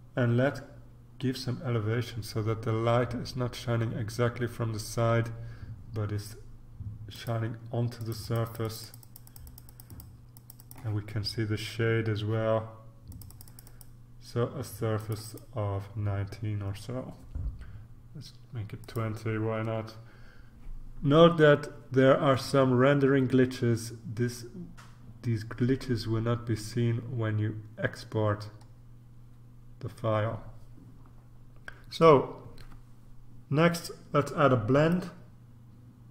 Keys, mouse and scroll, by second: 7.1 click, 8.0 click, 13.1 click, 15.0 click, 18.8 click, 28.0-28.9 scroll down 2, 34.8-36.1 drag.